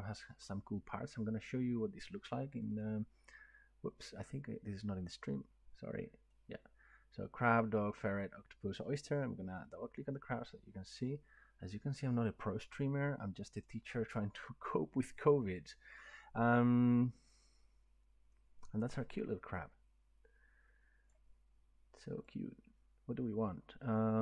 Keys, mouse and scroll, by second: 2.8 click, 6.3 click, 9.6 click, 13.6 click, 15.0 click, 16.2 click, 21.1 click, 21.4-21.8 scroll, 23.8 scroll up 3.